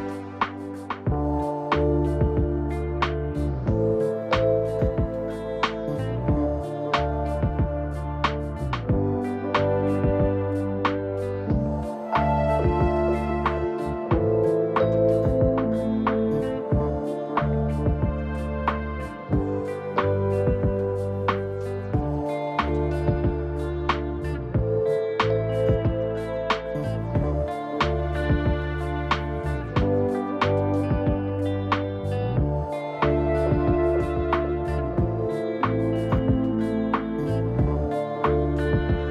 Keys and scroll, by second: 1.8 Page_Up, 16.3 F9, 19.6 0, 32.9 BackSpace, 35.7 t, 37.1 Return.